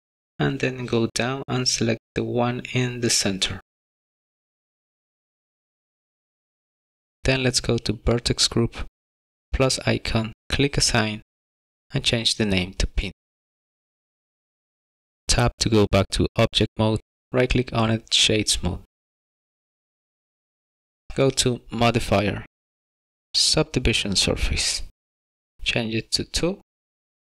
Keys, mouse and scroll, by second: 0.0 alt+shift+click, 0.7 middle click, 1.7 shift+middle click, 3.6 shift+click, 4.8 middle click, 6.2 scroll down 2, 6.7 shift+middle click, 7.6 click, 9.0 click, 10.7 click, 11.2 click, 12.3 click, 12.5 click, 15.8 Tab, 18.6 right click, 22.7 click, 23.8 click.